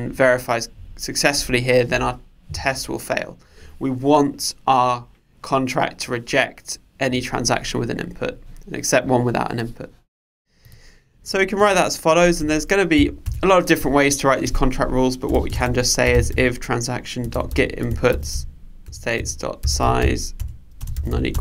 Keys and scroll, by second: 18.9 Return.